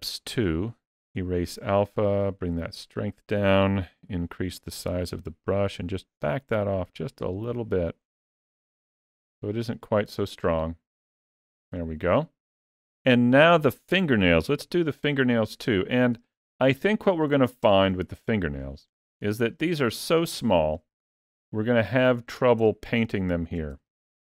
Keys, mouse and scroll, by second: 0.3 click, 2.1 click, 3.8 f, 5.9 click, 7.8 click, 8.7 click, 10.5 middle click, 15.0 shift+middle click, 16.3 shift+middle click, 16.8 middle click, 17.4 shift+middle click, 18.1 ctrl+middle click, 19.1 shift+middle click, 19.6 middle click, 20.3 shift+middle click, 21.0 ctrl+middle click, 22.6 shift+middle click, 23.7 ctrl+middle click.